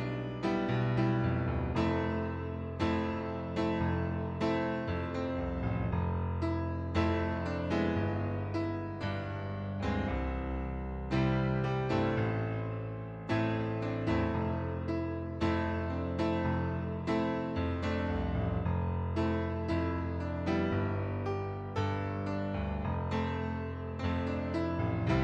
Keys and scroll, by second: 11.1 ctrl+d, 20.3-21.1 typing, 23.1-23.8 typing.